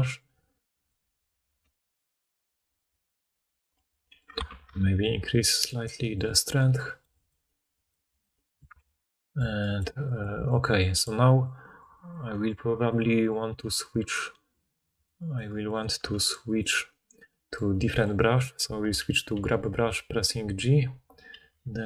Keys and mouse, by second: 1.4 f, 1.7 click, 4.4 shift+f, 8.8 ctrl+z, 17.9 click, 17.9 middle click, 17.9 right click, 19.3 g, 21.7 f.